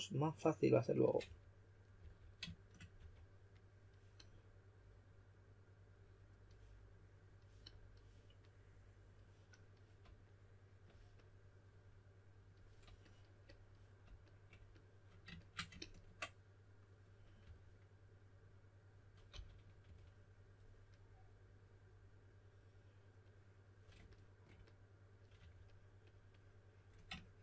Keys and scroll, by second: 1.2-2.9 typing, 17.4 typing, 19.3-19.8 typing, 25.3 typing.